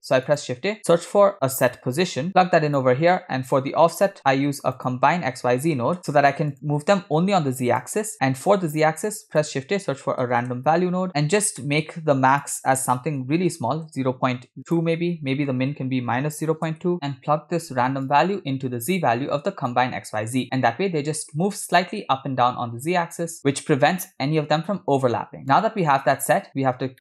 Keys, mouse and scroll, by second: 3.2 click, 4.2 shift+a, 7.2-8.0 drag, 8.3 middle click, 8.8 shift+a, 11.2-11.6 scroll up 4, 11.6 middle click, 12.4-13.8 drag, 14.7-16.7 drag, 17.0 ctrl+right click, 18.2-19.9 drag, 25.5 scroll down 4, 25.6 middle click, 26.9 middle click.